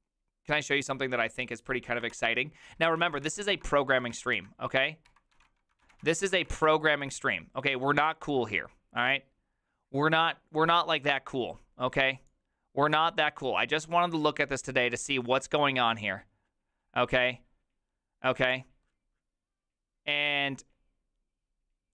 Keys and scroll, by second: 2.1 ctrl+t, 2.7-7.0 typing.